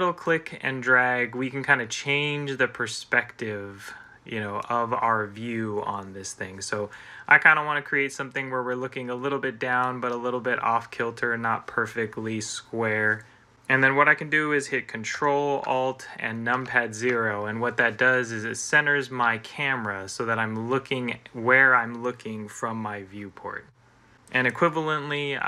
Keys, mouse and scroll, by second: 16.4 ctrl+alt+0.